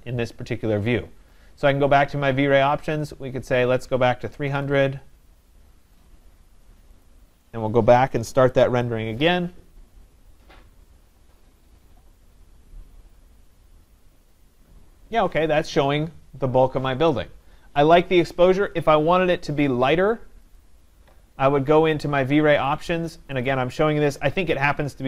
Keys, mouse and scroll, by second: 1.8 click, 3.8 click, 4.0-5.0 typing, 6.1 click, 7.1 click, 9.8-12.1 drag, 20.6-23.4 drag.